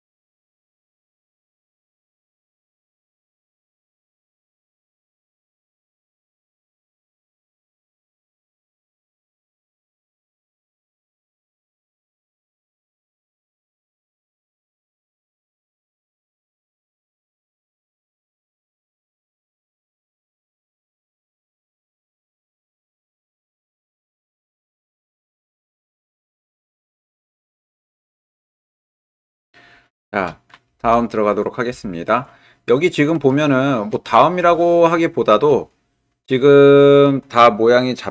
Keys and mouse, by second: 0.4 shift+click, 1.0 ctrl+click, 2.0-4.8 shift+drag, 7.9 click, 9.3 alt+z, 10.3 click, 11.5 alt+z, 12.6 g, 17.6 g, 32.2 middle click, 32.5 middle click, 33.5 shift+click, 34.1 middle click, 34.7 ctrl+click, 35.7-36.7 middle drag, 36.9-38.1 middle drag.